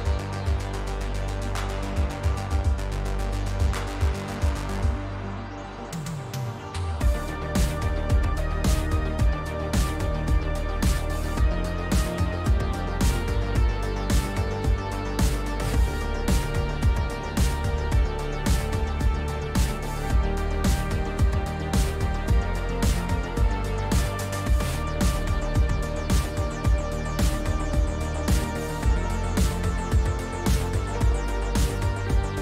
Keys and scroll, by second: 20.1 s, 27.9 w, 30.3 q.